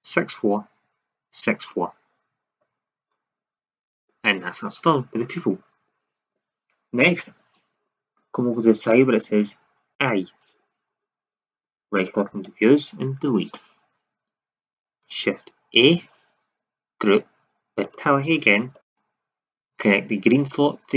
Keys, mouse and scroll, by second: 9.9-11.8 drag, 12.0 click, 13.2 Delete, 15.6 shift+a, 18.8-19.1 drag, 19.1 click.